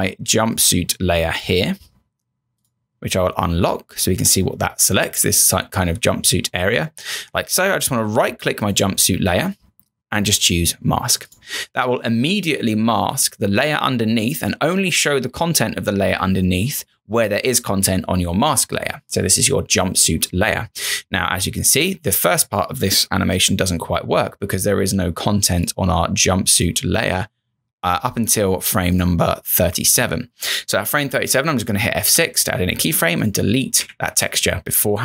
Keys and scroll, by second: 32.1 F6.